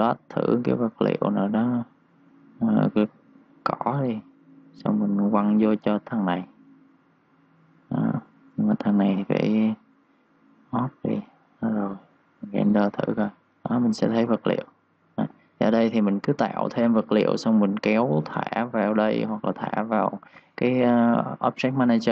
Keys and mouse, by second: 2.9 click, 3.6 click, 18.1 click.